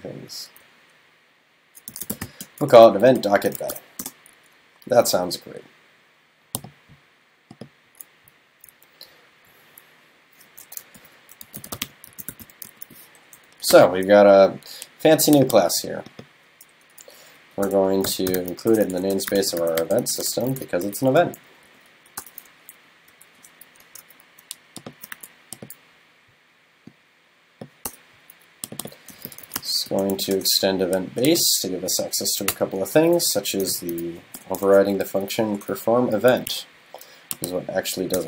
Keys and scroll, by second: 11.0 super+., 22.6 super+Down.